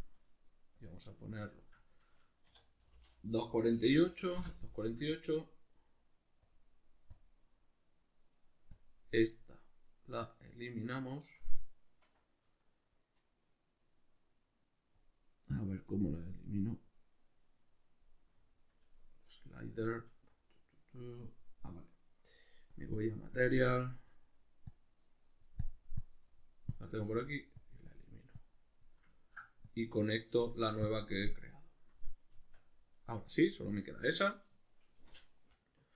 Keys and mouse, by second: 10.1-16.9 right drag, 16.9-24.0 drag, 20.1 Tab, 24.0-24.7 middle drag, 24.7-26.1 drag, 26.7 click, 27.1 x, 27.6 click, 28.4 click, 29.2-29.7 ctrl+middle drag, 29.7 click, 30.8-32.3 drag, 32.3 Tab.